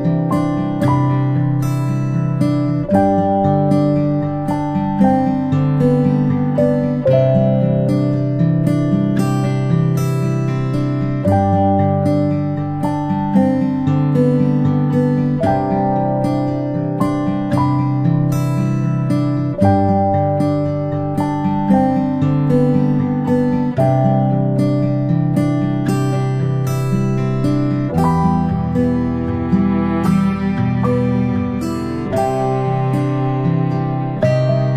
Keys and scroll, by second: 9.3-10.1 ctrl+space, 21.9-23.2 ctrl+space, 25.1 p, 31.4-31.8 ctrl+space, 32.3 ctrl+space, 33.2 space, 33.4 space.